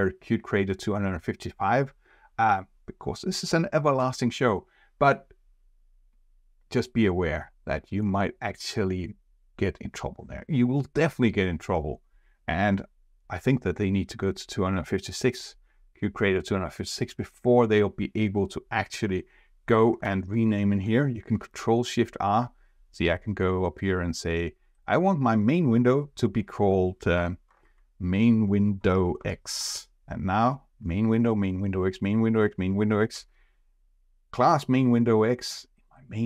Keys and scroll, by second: 20.0 ctrl+shift+r, 27.1 ctrl+shift+r, 33.1 F4.